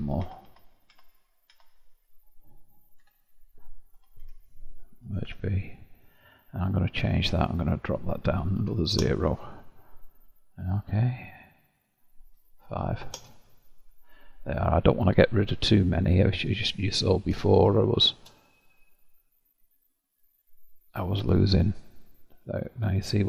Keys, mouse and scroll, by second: 0.2 ctrl+z, 1.0 ctrl+z, 1.5 ctrl+z, 3.0 Tab, 3.9 Tab, 4.3 a, 5.1 m, 7.3-10.3 drag, 10.7-14.4 drag, 14.4-15.1 scroll up 6, 15.1 click, 15.7-16.8 middle drag, 16.8-17.4 scroll up 4, 17.4 scroll up 1, 17.5-18.5 shift+middle drag, 18.5-19.7 scroll up 1, 19.7-22.7 middle drag, 23.1-23.2 scroll up 3.